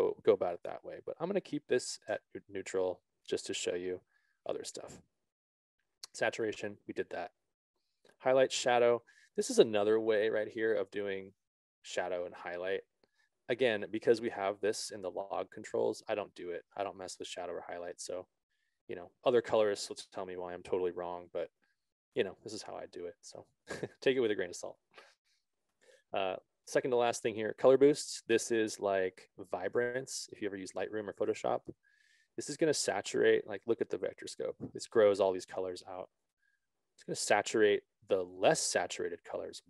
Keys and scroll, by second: 2.1 5, 2.4 0, 2.9 Return.